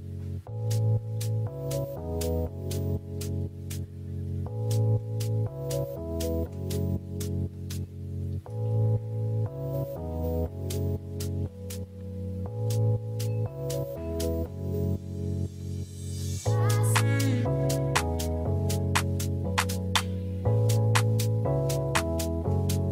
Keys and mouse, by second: 20.7 middle drag, 21.1 space, 22.3-22.9 middle drag.